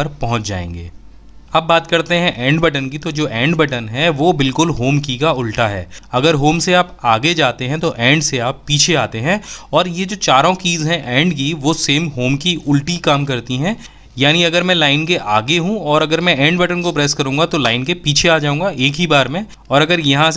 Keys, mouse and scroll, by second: 1.4 Return, 16.4 Return.